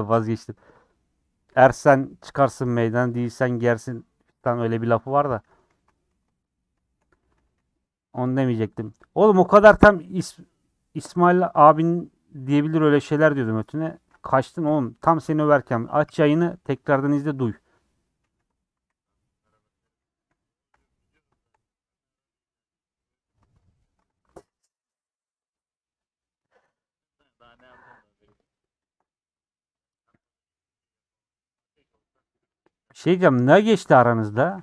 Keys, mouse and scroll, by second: 0.0 scroll down 1, 0.2-1.3 middle drag, 1.3 KP_1, 4.1 3, 4.8 click, 5.0 middle click, 5.7 alt+z, 6.1 alt+z, 6.3 scroll up 1, 6.5 middle click, 7.1 3, 7.6 c, 13.9 middle click, 14.6 ;, 15.3-16.8 middle drag, 16.8 click, 17.0 c, 18.3 3, 18.9 c, 20.2 ;, 20.5-22.6 middle drag, 22.6 click, 23.0-24.1 middle drag, 24.1 alt+click, 24.7 middle click, 25.7-27.5 middle drag, 27.5 alt+click, 27.8-28.9 middle drag, 28.9 alt+shift+click, 29.4 middle click, 29.9 scroll up 2, 30.8-31.6 scroll up 1, 31.6 click, 34.4 a.